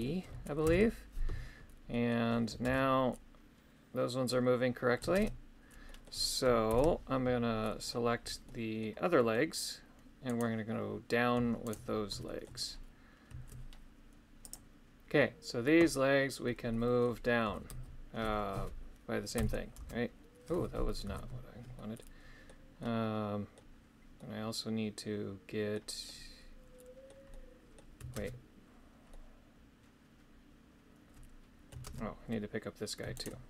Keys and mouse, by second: 1.9 middle click, 5.8 middle click, 6.7 shift+Left, 7.6 middle click, 8.4 middle click, 9.2 middle click, 10.3 right click, 11.7 shift+right click, 12.2 shift+middle click, 16.7 middle click, 21.7 middle click, 22.8 middle click, 24.1-25.7 middle drag, 26.0-27.1 middle drag, 27.3 middle click, 29.1-31.7 middle drag, 33.2 shift+right click.